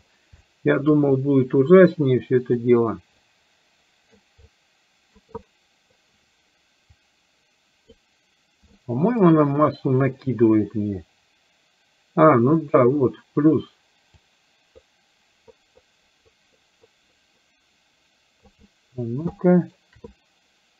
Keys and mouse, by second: 0.6 shift+middle click, 1.2-2.7 drag, 3.3 click, 4.4 click, 5.6 middle click, 6.9-7.9 drag, 8.8 shift+middle click, 12.7 click, 14.2-18.6 drag, 18.7 middle click, 19.4 shift+middle click.